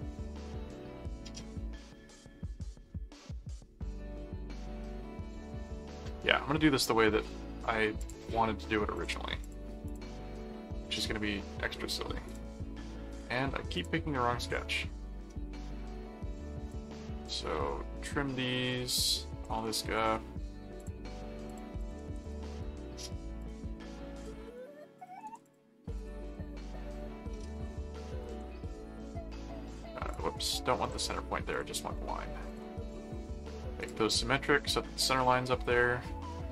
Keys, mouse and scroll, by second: 8.0 click, 8.9-10.4 drag, 12.3 click, 13.1 click, 13.8 click, 14.4 click, 16.6 click, 17.7-19.4 drag, 19.9 right click, 20.8 click, 21.5 click, 22.1 alt+c, 22.4 right click, 23.4 click, 24.2-26.8 drag, 25.3 alt+c, 26.4 ctrl+alt+c, 26.9 ctrl+click, 27.5 ctrl+click, 28.2 ctrl+alt+click, 30.1 click, 30.8 ctrl+click, 31.5 ctrl+click, 32.5 ctrl+click, 33.8 click.